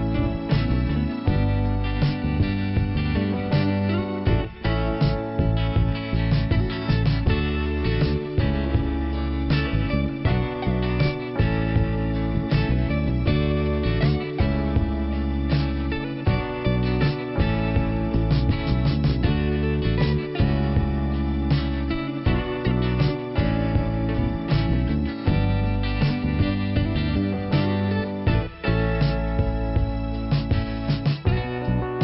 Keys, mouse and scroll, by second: 1.6 scroll down 2, 2.6 click, 4.3 scroll up 1, 7.7 click, 11.2 click, 15.8 right click, 16.3 click, 17.9 click, 18.0 click, 19.1 click, 19.1 click, 20.1 click, 23.9 click, 25.3 Delete, 26.1 click, 26.2 click, 27.1 Delete, 27.4 click, 27.5 click, 29.4 click, 31.2 click.